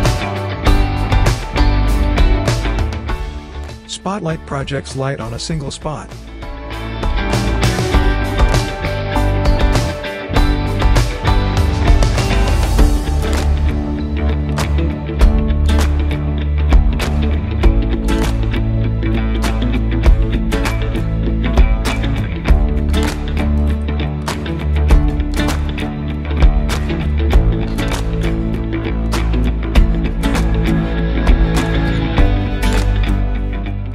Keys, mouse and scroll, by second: 0.0-2.6 typing, 3.9 w, 4.6-6.8 drag, 9.4 typing, 10.1 click, 13.2-15.2 drag, 18.9-21.2 drag, 25.1-25.7 drag, 28.2 click, 32.2-33.9 drag, 32.5-32.8 typing.